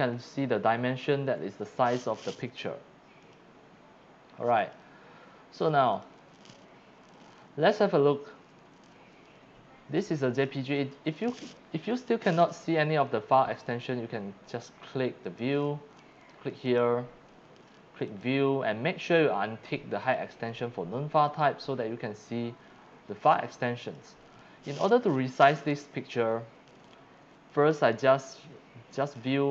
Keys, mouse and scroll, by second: 3.2 click, 4.6 click, 5.9 click, 6.3 click, 7.7 click, 15.2 click, 16.6 click, 18.1 click, 20.0 click, 20.5 click, 21.3 click, 23.8 click, 27.8 right click, 29.0 click.